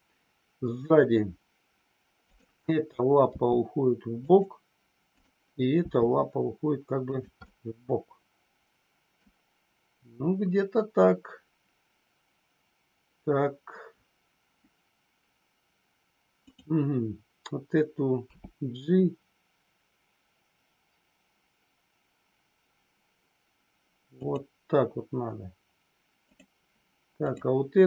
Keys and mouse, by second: 2.1 click, 3.4 g, 4.1 click, 5.8 g, 7.0 click, 7.3-9.1 middle drag, 16.4 click, 18.3 g, 24.1 click, 27.3 click.